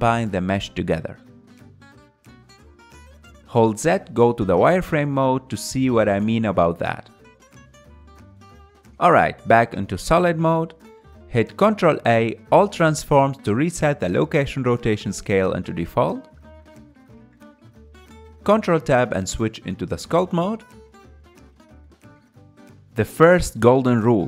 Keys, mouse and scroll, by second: 0.6 ctrl+shift+KP_Add, 2.5-5.6 middle drag, 5.6 z, 6.8-9.6 middle drag, 9.6 z, 10.5-15.4 middle drag, 15.4 ctrl+a, 18.7 KP_1, 21.5 ctrl+Tab.